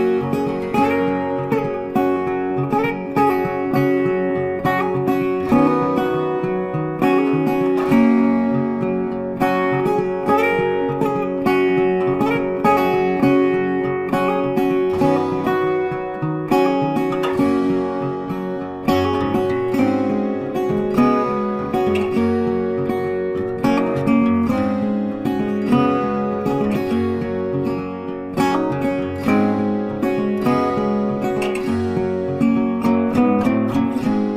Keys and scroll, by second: 9.0 ctrl+t.